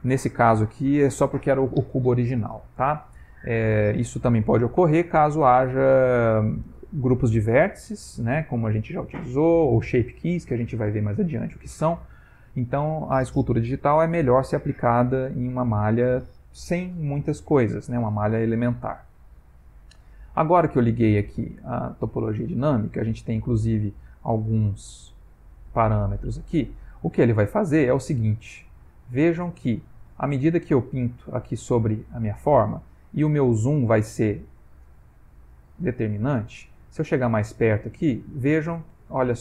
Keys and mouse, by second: 22.3 click, 28.3 ctrl+middle click, 29.7 ctrl+middle click, 29.9 ctrl+middle click, 30.5 click, 32.1 click, 32.7 click, 33.3 click, 36.6 ctrl+middle click, 37.2 ctrl+middle click, 37.8 click.